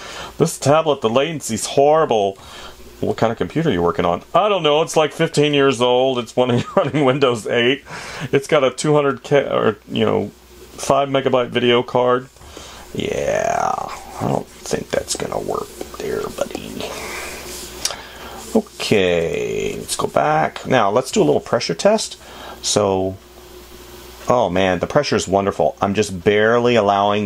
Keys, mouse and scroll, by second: 2.8 space, 6.0 space, 12.9 space, 27.1 ctrl+z.